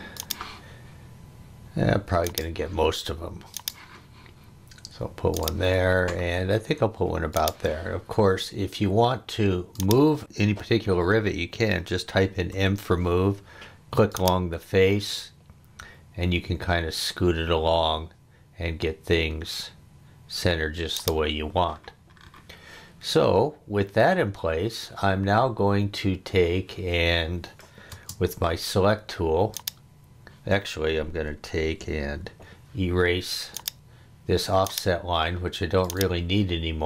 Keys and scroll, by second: 12.5 m, 27.9 space, 32.2 e.